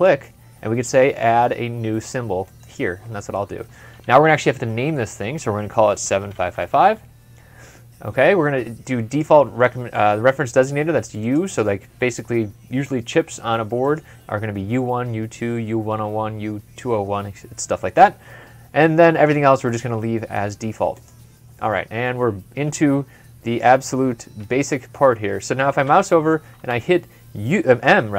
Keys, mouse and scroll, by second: 5.7-6.9 typing, 21.6-22.1 scroll up 2, 23.0 scroll up 1, 23.5 scroll down 1, 23.7 scroll up 1, 23.8 scroll down 1, 23.8-24.2 scroll up 1, 24.3 m, 24.4 scroll up 1, 24.7 scroll down 1, 25.2 scroll up 1, 25.4 scroll down 1, 26.3 Escape.